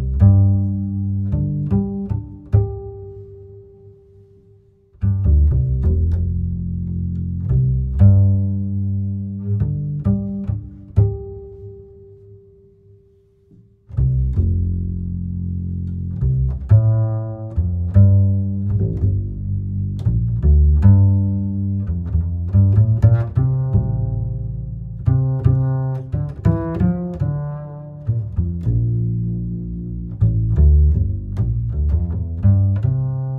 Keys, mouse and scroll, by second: 1.3-4.4 shift+drag, 12.2-13.4 middle drag, 13.4 click, 15.9-16.4 scroll down 4, 16.4-18.6 middle drag, 18.6-21.6 drag, 21.8-24.8 drag, 24.8-26.1 middle drag, 26.1-28.6 drag, 28.6-29.1 scroll down 5, 29.1-30.1 middle drag, 30.1-33.2 ctrl+right drag, 33.2 click.